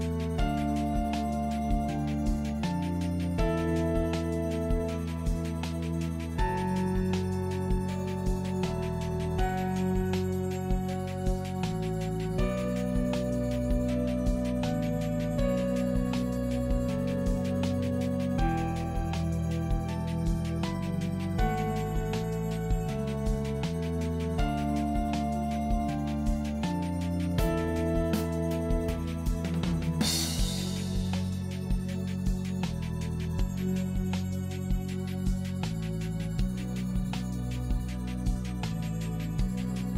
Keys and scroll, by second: 4.8 Return, 5.5 Return, 7.1 Left, 11.4 ctrl+e, 12.3 ctrl+j, 13.8 ctrl+u, 36.9 k, 37.0 e, 38.1 f.